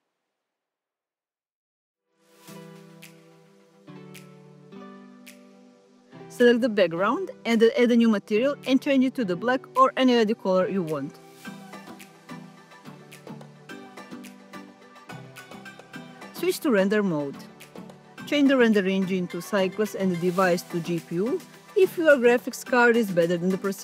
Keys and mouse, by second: 6.3 click, 9.6 click, 10.8 click, 17.9 click, 19.0 click, 19.6-21.0 drag, 22.4-23.0 drag, 23.7 click.